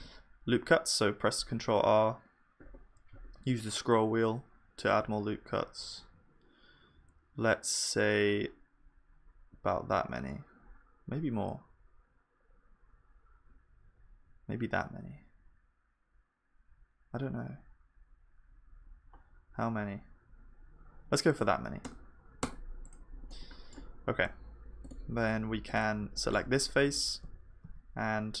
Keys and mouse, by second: 24.9-28.4 drag, 24.9-28.4 right drag, 26.8 e.